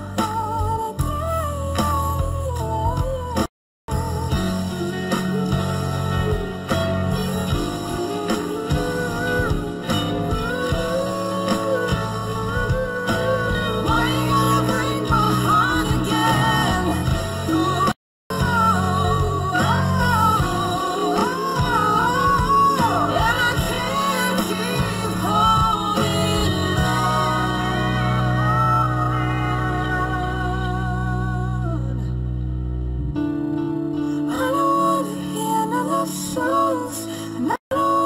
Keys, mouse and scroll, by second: 8.8 [.